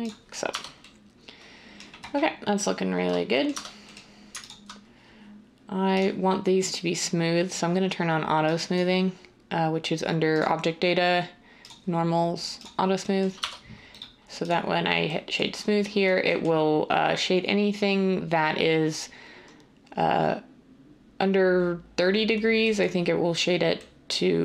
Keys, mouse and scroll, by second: 0.5 Tab, 3.5 Tab, 13.3 Tab.